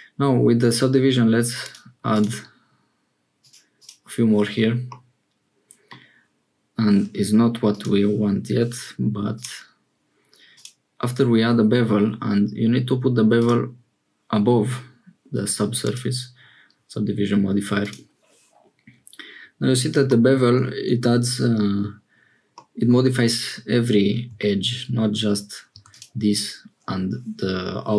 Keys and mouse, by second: 2.1 click, 3.3 click, 3.7 click, 4.9-5.9 middle drag, 9.3-10.8 drag, 13.3 click, 15.8 click, 22.5 middle click, 24.3 Tab, 25.7 3, 25.8 click.